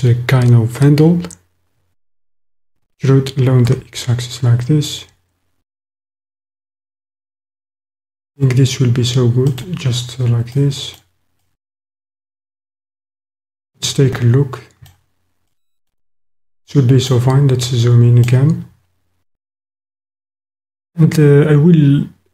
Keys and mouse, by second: 2.8 e, 3.7 x, 9.6 click, 10.6 click, 11.0-11.5 middle drag, 11.5 click, 12.0 middle click, 12.7-14.9 middle drag, 15.5 click, 17.7 click, 17.8 middle click.